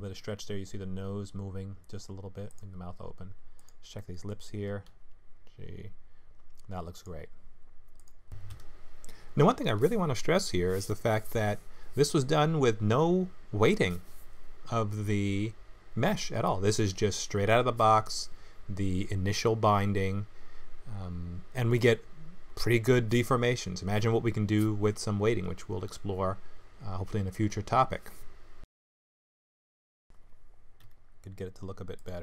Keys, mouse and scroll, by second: 3.6 click, 3.9 middle click, 4.9 g, 7.9 click, 8.3 middle click, 8.9 middle click, 9.5 g, 10.8 middle click, 11.9 middle click, 12.4 g, 13.6 middle click, 14.4 g, 15.9 middle click, 16.9 g, 18.1 click, 18.4 middle click, 18.9 g, 21.0 click, 21.4 g, 22.7 middle click, 22.7 scroll down 1, 25.0 click, 25.4 middle click, 26.1 g, 27.7 middle click, 28.7 KP_Decimal, 29.4 middle click, 30.8 g.